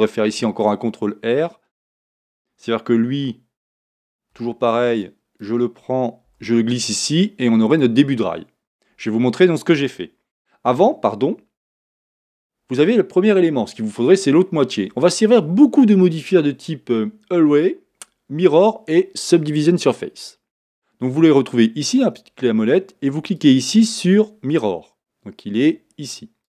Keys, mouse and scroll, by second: 0.2 ctrl+r, 3.9 ctrl+r.